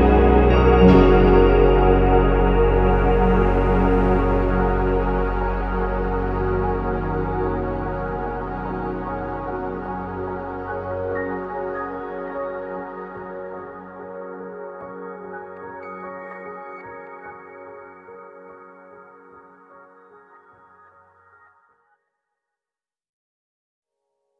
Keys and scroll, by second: 0.2 ctrl+c, 0.5 ctrl+v, 1.2 0, 4.5 ctrl+s, 7.1 0, 7.7 0, 9.0-9.9 typing, 11.2-11.5 typing, 11.5 Return, 13.8 Escape, 15.2 3, 15.2 Return, 15.7 Escape, 20.2 ctrl+c, 21.7 ctrl+c, 24.2 ctrl+z.